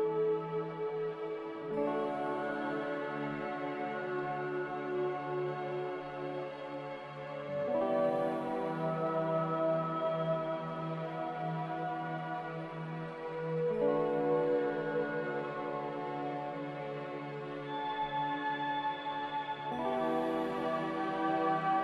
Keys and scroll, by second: 17.6 n.